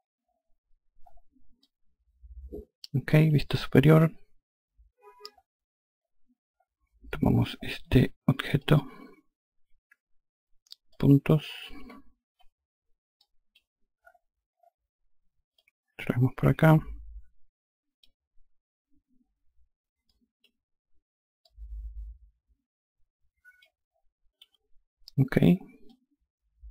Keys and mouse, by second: 1.1 alt+click, 3.3 F2, 8.1 click, 10.4 click, 11.9 5, 12.7 click, 15.1 click, 19.6 click, 20.9 click, 24.3 F1, 25.4 alt+click.